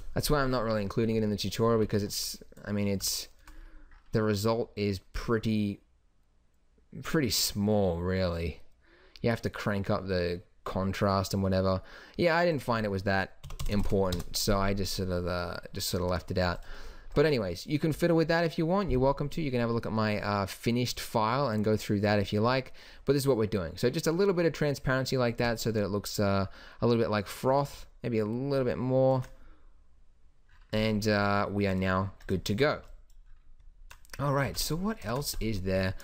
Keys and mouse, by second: 1.7 shift+b, 12.6-13.8 drag, 13.8 KP_0, 13.9 KP_0, 18.0 x, 27.3-30.7 drag, 31.7-32.3 drag, 32.7 shift+b, 34.1 middle drag, 34.5 shift+b, 35.1 ctrl+s, 35.7 z.